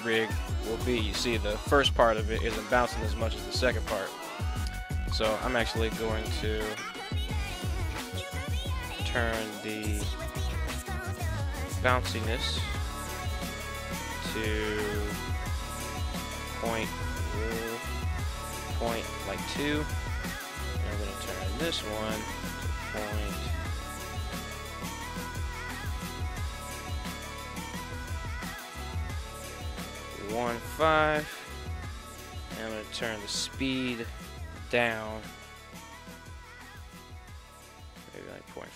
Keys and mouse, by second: 3.2 right drag, 4.4 right click, 6.7 right click, 8.2 right click, 9.6 middle click, 10.8-11.7 middle drag, 13.2-20.0 drag, 20.8 right click, 21.9-31.4 drag, 32.6-38.7 drag.